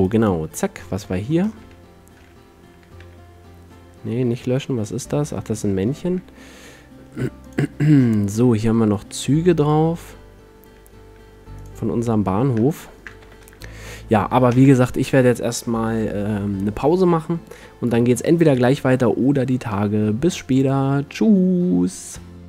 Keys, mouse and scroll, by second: 0.0 middle click, 0.1-1.4 drag, 1.4-3.6 middle drag, 2.3 a, 3.1 x, 4.3 KP_Decimal, 6.3 a, 7.6-9.1 drag, 11.3 a, 13.4 z, 14.7 ctrl+s, 14.9 middle click.